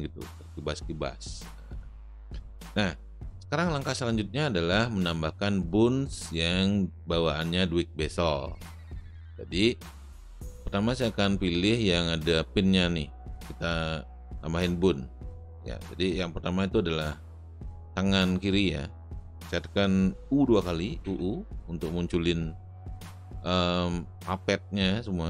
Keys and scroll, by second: 21.1 u.